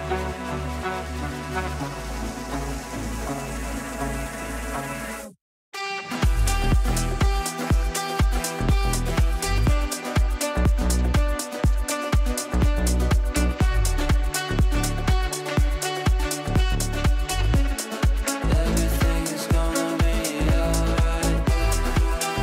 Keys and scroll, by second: 0.2 Delete.